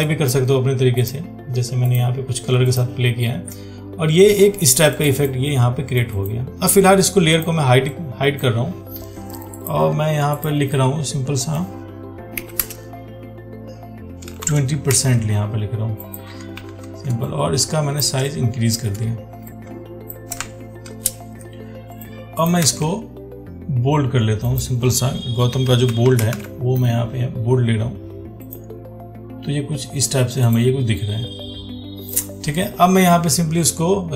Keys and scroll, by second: 15.1 ctrl+a, 16.8 ctrl+t, 22.9 ctrl+a.